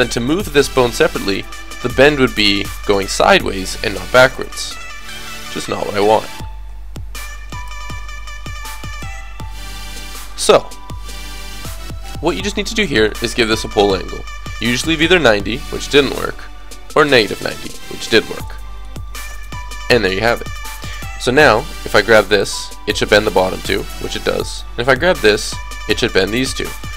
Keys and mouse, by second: 4.4 ctrl+z, 5.4 ctrl+z, 5.7 ctrl+z, 6.4 ctrl+z, 8.7 alt+r, 9.0 alt+g, 11.3-14.7 drag, 12.8 right click, 14.7-15.8 middle drag, 15.8-17.6 drag, 17.6 middle click, 18.1 middle click, 21.7-24.0 drag, 22.1 g, 24.0 middle click, 24.5-26.9 drag, 24.9 g.